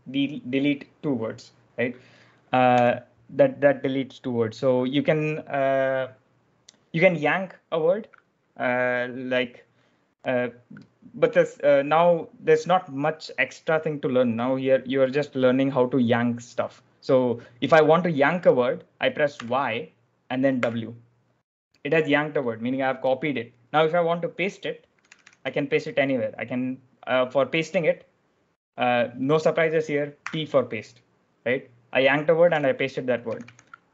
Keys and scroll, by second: 2.6 u, 19.3 y, 20.5 w, 24.6-25.9 typing, 30.1 p, 32.4-33.4 typing.